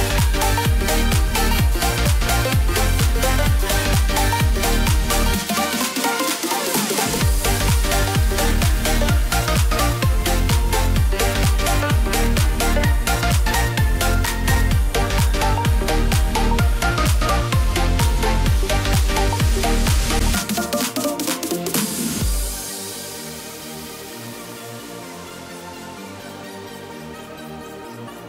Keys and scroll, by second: 28.1 ctrl+t.